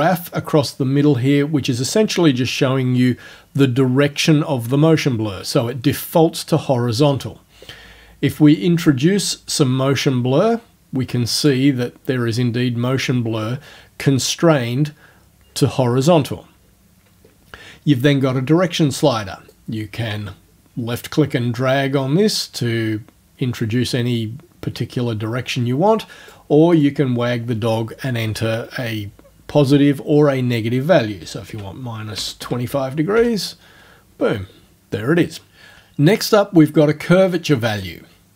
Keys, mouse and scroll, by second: 8.6-11.7 drag, 19.5-26.5 drag, 26.8 right click, 31.5 KP_Subtract, 32.2 KP_2, 32.4 KP_5, 33.2 KP_Enter, 37.4-38.3 drag.